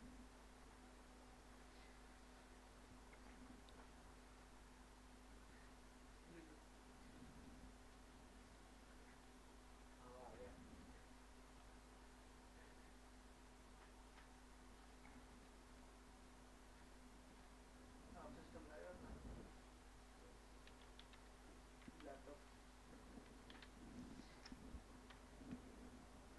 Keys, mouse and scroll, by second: 6.6 click, 9.2-12.6 scroll down 1, 12.6-13.2 scroll up 1, 14.8-18.7 scroll down 1, 18.7 click, 20.5-25.1 typing.